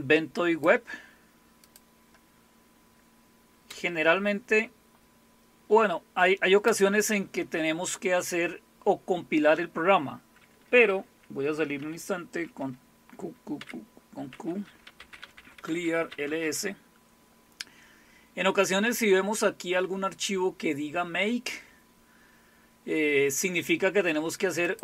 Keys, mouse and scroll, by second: 1.6 click, 3.0 scroll down 2, 3.7 space, 6.7 space, 12.5 ctrl+x, 13.6-16.4 typing, 24.6 click.